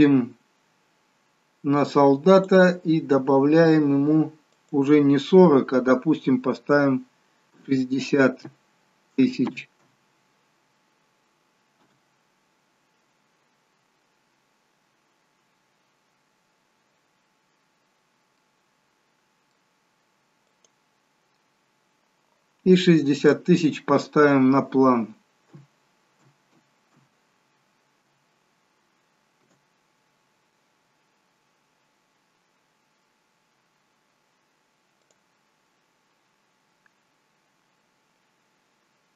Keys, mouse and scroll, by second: 3.5 click, 3.5-4.3 scroll up 20, 18.0 scroll up 1, 18.9 middle click, 20.9 click, 34.4-35.9 scroll down 1, 38.2 click.